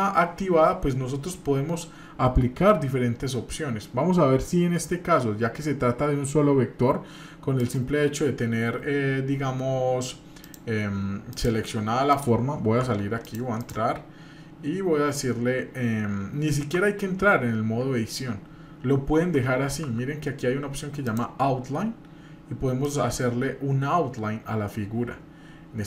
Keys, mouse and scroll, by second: 7.6 click, 10.4 click, 11.3 click, 12.1 click, 12.8 Tab, 13.2 click, 13.6 click, 16.7 Tab, 17.8 Tab, 19.8 Tab, 21.0-25.8 drag.